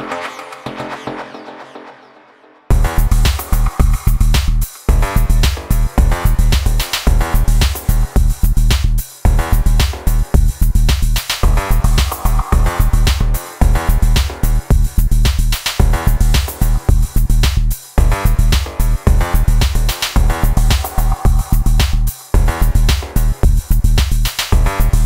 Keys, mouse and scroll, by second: 20.4 click, 20.8 click, 21.1 shift+right click, 21.5 click, 21.9 click, 22.7 click, 22.8 BackSpace, 23.3 click, 23.5 click, 23.8 click, 24.1 click, 24.2 middle click, 24.3 s, 24.4 click, 24.5 middle click, 24.7 click, 25.0 click.